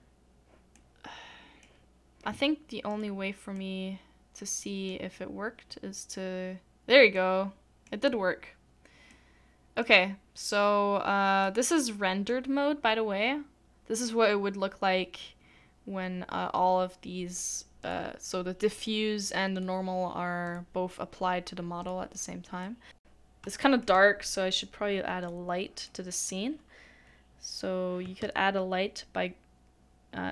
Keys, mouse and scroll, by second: 0.7 middle click, 3.6 middle click.